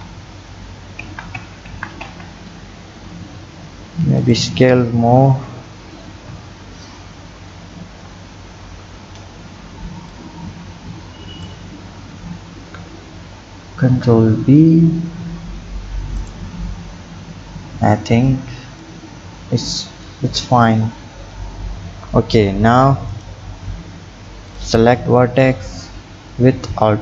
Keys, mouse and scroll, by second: 1.0 ctrl+z, 1.4 ctrl+z, 1.7 ctrl+z, 2.0 ctrl+z, 3.4 s, 5.2 KP_1, 6.2 KP_3, 7.9 ctrl+KP_3, 8.8-10.1 scroll up 3, 10.1-12.6 drag, 12.6 ctrl+b, 16.6-17.9 scroll down 3, 17.9 click, 20.2 Tab, 21.0 Tab, 23.1 click, 24.5 alt+click.